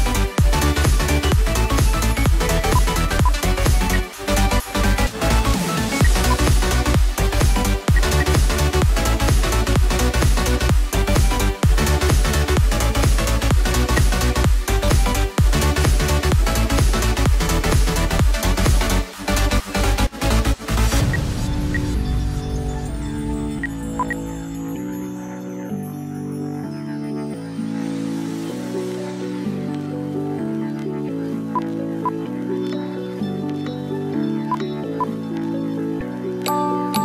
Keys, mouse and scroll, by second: 3.8 space, 4.8 right click, 5.9 F11, 6.2 alt+w, 7.5-8.2 typing, 13.2-13.7 scroll down 1, 14.0 F2, 21.0 space, 21.6 space, 23.4 space, 23.9 ctrl+q, 24.3 ctrl+double click.